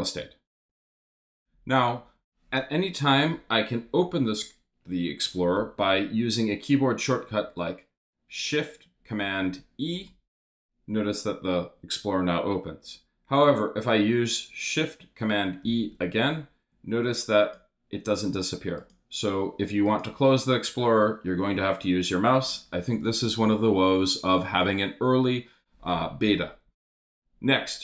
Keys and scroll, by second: 9.9 shift+super+e, 15.6 shift+super+e.